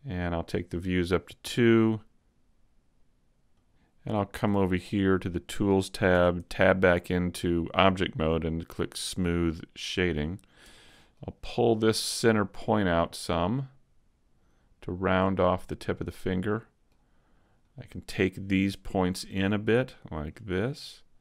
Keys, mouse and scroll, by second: 3.5 click, 5.0 click, 6.1 Tab, 9.1 click, 10.6 Tab, 10.9 middle click, 10.9 middle click, 11.9 click, 15.4 middle click, 17.6 right click, 18.2 shift+right click, 18.9 right click, 19.4 middle click, 20.3 click.